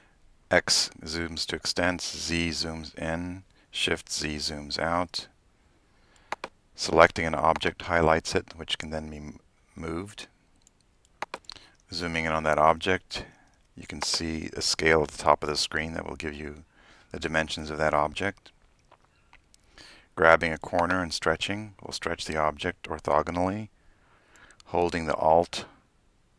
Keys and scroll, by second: 0.0-0.7 typing, 2.4-4.8 typing, 11.8-16.8 typing, 19.0 x, 20.9 x.